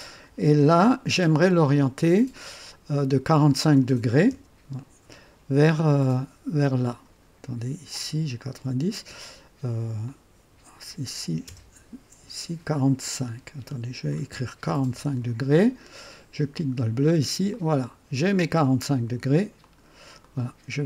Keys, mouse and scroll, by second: 4.3 KP_3, 5.7-6.4 drag, 10.0 click, 11.5 KP_0, 11.5 KP_0, 13.1 click, 13.7 click, 14.7 KP_4, 14.9 KP_5, 16.5 click, 17.5-18.9 drag, 19.6 click, 20.2 right click.